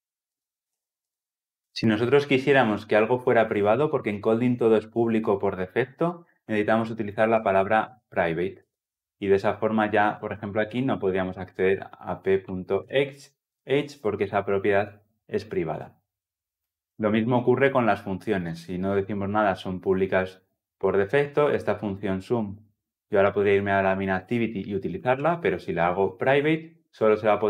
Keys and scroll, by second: 8.4 Return, 25.5 Return.